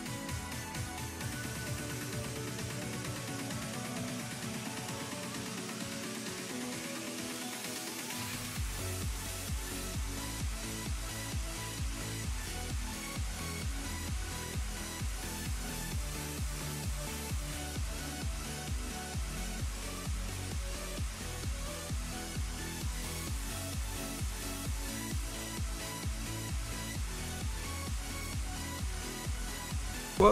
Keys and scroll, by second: 13.1 s, 20.4 s, 27.2 s, 29.9 ctrl+z.